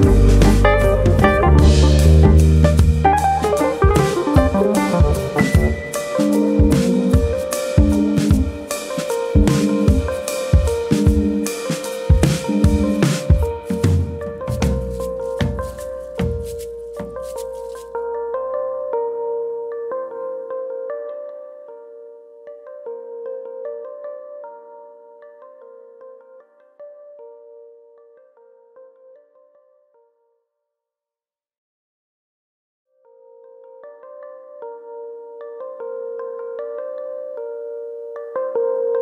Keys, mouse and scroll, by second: 6.0 alt+click, 6.4 right click, 7.8 middle click, 8.6 alt+click, 10.1 middle click, 10.8 alt+click, 11.1 right click, 12.5 alt+click, 12.8 right click, 14.2 alt+click, 14.4 right click, 16.2 click, 16.8 ctrl+KP_Add, 17.5 right click, 18.5 middle click, 20.7 middle click, 22.5 middle click, 22.5 alt+click, 23.5 click, 24.4 ctrl+z, 24.5 scroll up 2, 24.7 middle click, 25.4 click, 29.8 click, 30.9 alt+click, 31.5 alt+click, 32.3 middle click, 32.6-33.3 scroll down 5, 32.9 middle click, 33.6-34.0 scroll down 3, 34.0 middle click, 34.6-35.1 scroll up 2, 34.8 middle click, 35.1 Tab, 35.5-36.2 scroll down 2, 35.7 middle click, 38.2 middle click.